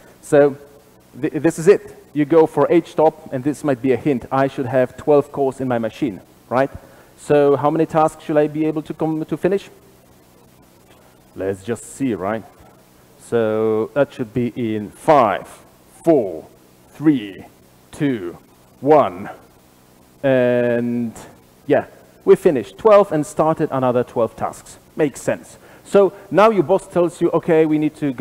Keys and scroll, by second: 12.5 ctrl+shift+r, 12.5 ctrl+shift+F10.